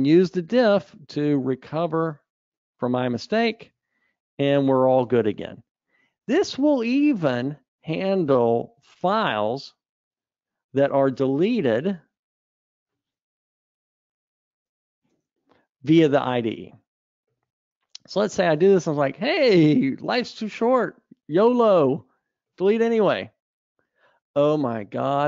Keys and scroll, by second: 7.3 super+Up, 11.7 ctrl+alt+t, 15.5 super+Delete.